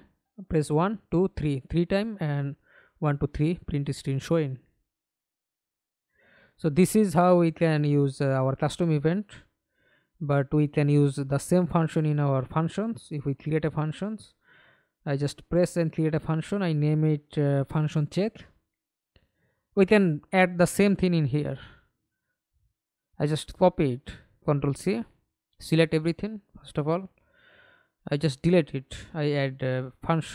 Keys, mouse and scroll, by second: 0.5 h, 0.7 h, 1.2 h, 3.5 Escape, 3.8 middle click, 4.6 F11, 6.7 right click, 8.3 right click, 8.8-9.3 scroll up 4, 9.3-12.3 scroll down 1, 13.9-17.4 typing, 18.3 right click, 19.5 right click, 21.9 right click, 23.2-24.9 scroll down 1, 25.2 shift+click, 26.4 ctrl+c, 26.9 right click, 29.0 Delete.